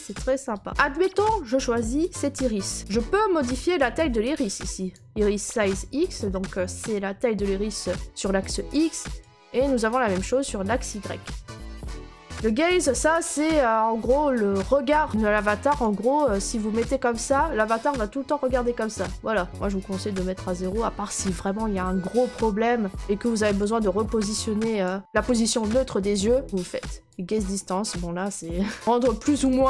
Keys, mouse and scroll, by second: 0.1 click, 0.7 right click, 2.0 scroll, 4.8 click, 13.2 click, 24.7 click, 29.3 click.